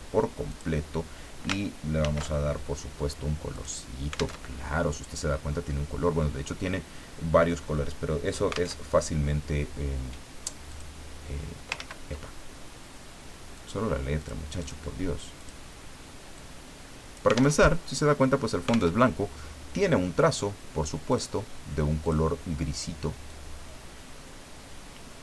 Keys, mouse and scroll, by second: 0.5 click, 2.0 ctrl+shift+f, 3.5 click, 4.4 alt+Tab, 8.8 alt+Tab, 10.7 click, 11.8 ctrl+z, 13.5 click, 14.2 click, 15.4 click, 16.3-17.6 drag, 17.6 alt+Tab, 18.9 alt+Tab, 21.1 click, 22.0 click, 23.3-25.2 drag.